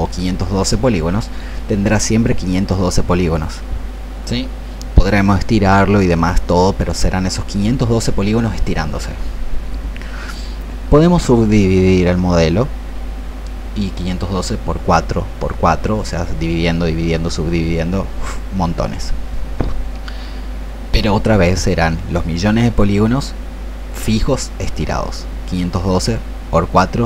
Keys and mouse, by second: 20.2 click.